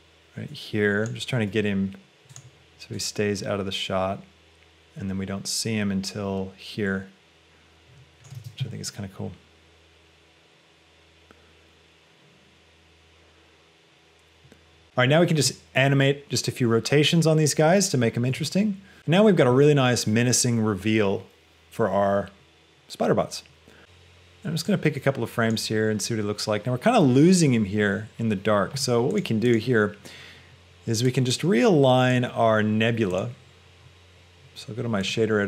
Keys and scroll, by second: 1.7 g, 8.6 space, 18.3 space.